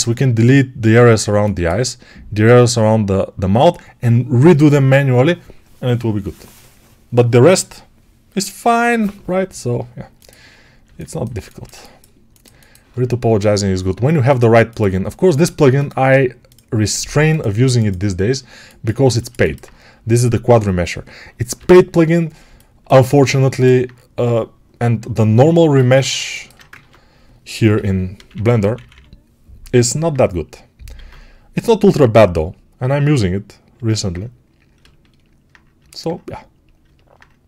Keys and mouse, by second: 10.7-30.7 alt+middle drag, 21.4 n, 26.6 ctrl+Tab, 27.6 g, 28.0 ], 28.2 ], 30.7-36.7 alt+drag, 31.3 alt+q, 36.7-37.4 alt+right drag.